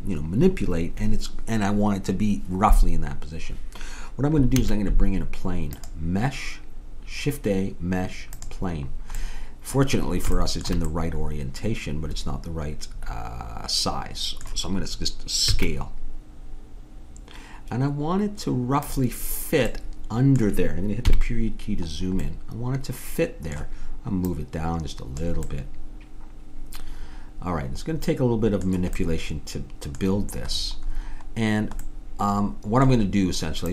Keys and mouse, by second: 4.6 shift+a, 9.2-12.2 middle drag, 15.6 s, 19.7-21.1 middle drag, 21.1 KP_Decimal, 21.9-23.1 middle drag, 24.3-26.1 drag, 25.5 right click, 26.1 middle click, 29.1 middle click.